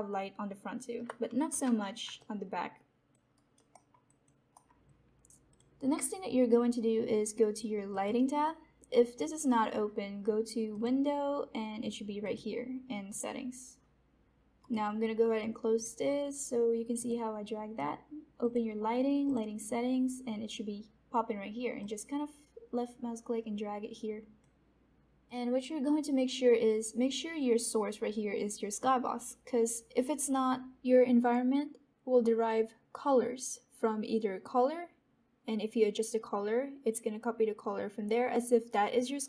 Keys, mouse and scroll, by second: 1.4 Escape, 2.1 alt+click, 3.3 alt+right click, 3.6 alt+middle click, 4.0 alt+click, 4.5 alt+middle click.